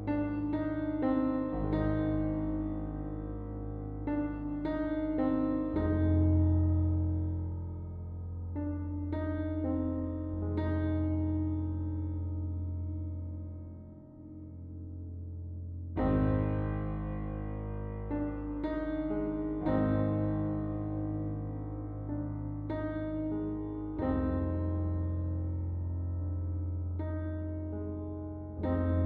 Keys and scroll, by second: 22.3-23.4 \, 24.1 \, 25.2 \, 25.7 \, 27.7-29.0 typing.